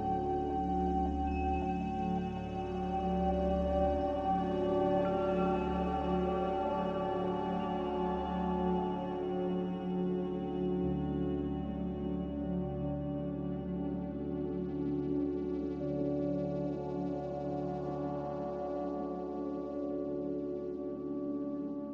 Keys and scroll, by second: 18.1 ctrl+z.